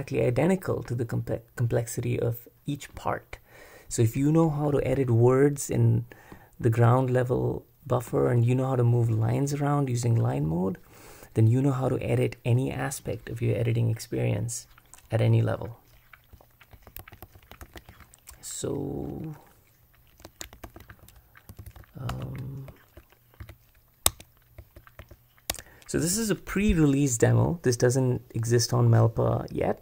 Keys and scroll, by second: 17.0 super+w, 17.6 super+b, 20.3 Escape, 20.7 super+b, 21.3-25.0 typing, 24.1 Tab, 25.6 Tab.